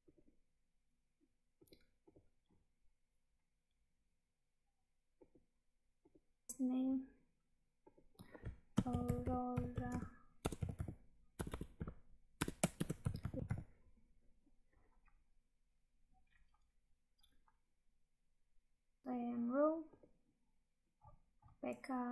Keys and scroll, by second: 6.5 Tab, 9.8 space, 19.0 Tab.